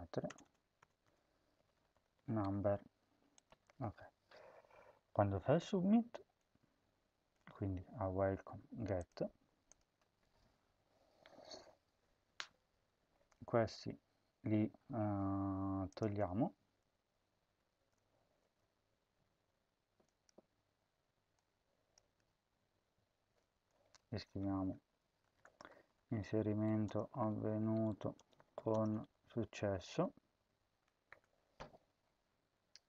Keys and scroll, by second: 0.2-2.9 typing, 3.6 ctrl+s, 17.6 typing, 22.0 ], 23.4 BackSpace, 24.1 Tab, 24.5 Tab, 25.0-31.0 typing.